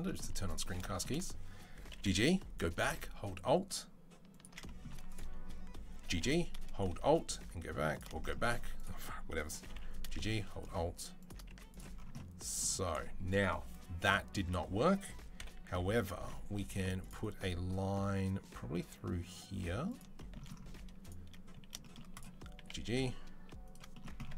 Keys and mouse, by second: 0.3 click, 1.7 g, 4.9 click, 5.0-8.6 middle drag, 5.8 g, 8.6 click, 9.0-11.1 middle drag, 9.4 g, 11.3 z, 15.2 KP_7, 15.5 z, 16.5 ctrl+r, 18.2-20.8 middle drag, 20.8 click, 20.9-24.3 middle drag, 22.4 g.